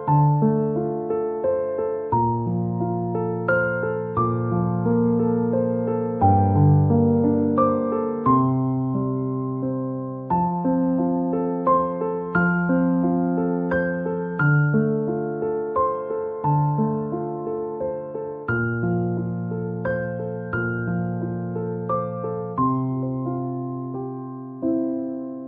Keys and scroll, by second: 13.6 ctrl+-.